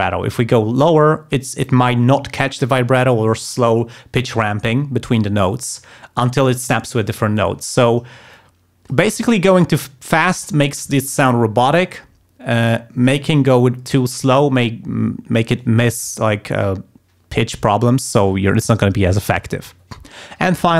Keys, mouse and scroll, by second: 8.3 click, 9.4 click.